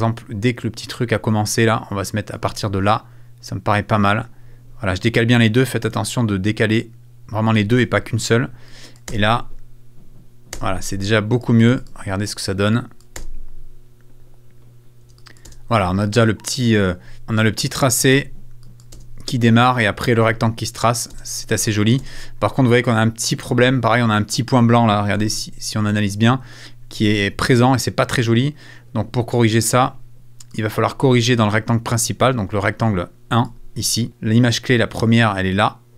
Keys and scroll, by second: 9.1 space, 10.5 space, 13.2 space, 15.0 space, 16.8 space, 18.1 space, 20.1 space.